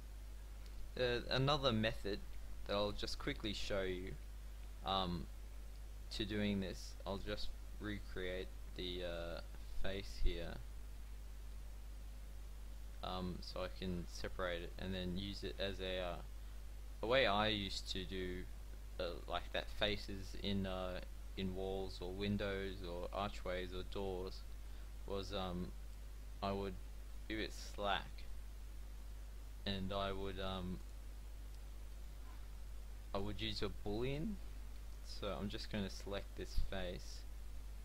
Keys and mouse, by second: 3.7 Tab, 17.1-22.2 middle drag, 22.6-26.1 middle drag, 29.2 f, 30.3 p, 31.6 Tab, 32.2 click, 32.4 g, 34.4 Tab, 36.7 Tab, 37.5 Tab.